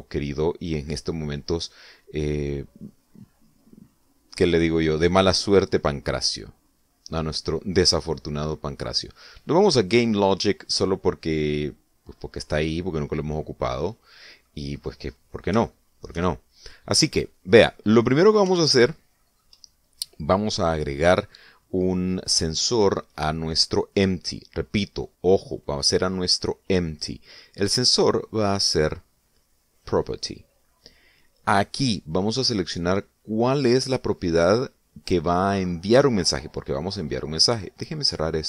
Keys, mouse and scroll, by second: 1.7 click, 8.6 click, 14.1-15.4 middle drag, 15.5 scroll up 1, 16.4 shift+scroll up 1, 16.5 shift+middle click, 17.1-18.2 shift+middle drag, 18.5 middle click, 19.4 shift+middle click, 28.7 click, 30.5 click.